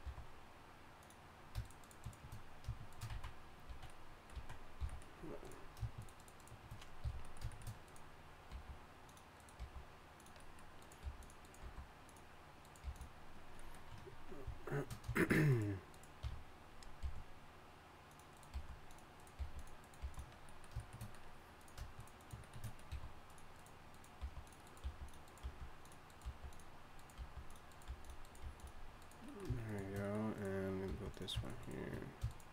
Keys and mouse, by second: 0.0 e, 3.1 x, 3.7 z, 4.3 z, 4.8 f, 7.0 f, 8.2 click, 8.5 g, 9.6 g, 11.0 g, 11.6 g, 12.2 click, 12.8 g, 16.2 f, 17.0 g, 18.5 g, 19.4 g, 20.0 g, 22.9 e, 24.2-28.4 typing, 30.9 g.